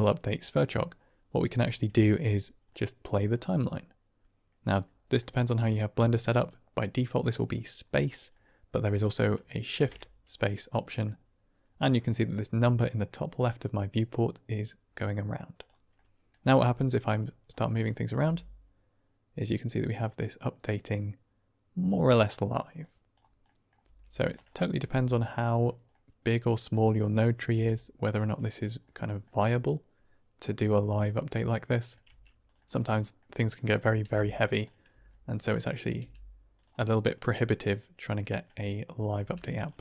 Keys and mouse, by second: 2.7-3.2 middle drag, 5.1-5.9 middle drag, 8.3-9.1 middle drag, 9.6 shift+space, 10.3-10.8 middle drag, 10.8-11.5 drag, 15.5 click, 15.9 middle click, 16.4 Tab, 17.2 click, 17.6 middle click, 18.1 g, 22.2 middle click, 22.7 click, 23.4 middle click, 23.8 g, 24.7 r, 25.9 middle click, 26.9 click, 27.5 g, 28.8-30.2 middle drag, 30.9-31.9 middle drag, 32.0 Tab, 32.4 click, 32.6 Tab, 32.6 middle click, 33.5 click, 34.0 g, 34.9 s, 35.6 click, 36.0 g, 36.8-38.8 middle drag, 38.8 click, 39.1 g.